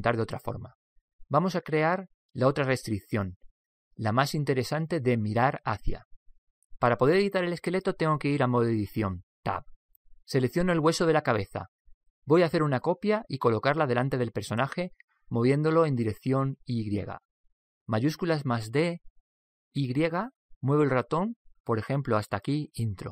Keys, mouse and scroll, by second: 9.0 Tab, 11.4 Tab, 12.8 right click, 15.1-16.7 middle drag, 17.6 shift+d, 19.2 shift+d, 19.2 y.